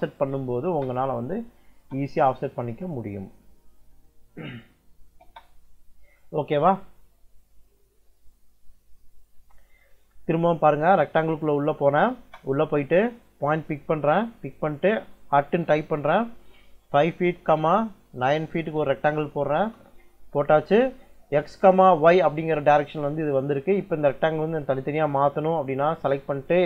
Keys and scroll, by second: 0.3 o, 0.5 space, 5.1 space, 7.2 Escape, 10.7-12.0 typing, 15.3 shift+2, 16.7 5, 17.1 ', 18.1 9, 18.6 ', 19.4 Return.